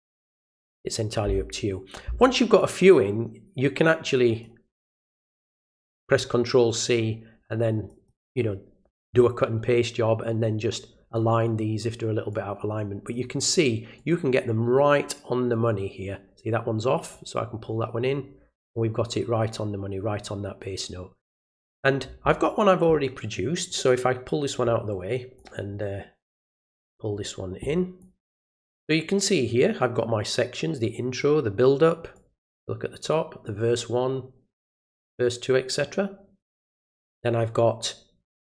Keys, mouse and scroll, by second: 0.2 click, 2.6-4.4 drag, 6.7 click, 7.9 click, 10.7 click, 12.3 click, 13.9 click, 17.1 click, 23.7-25.4 drag, 26.4-28.0 drag, 32.1-34.7 drag, 36.4 click.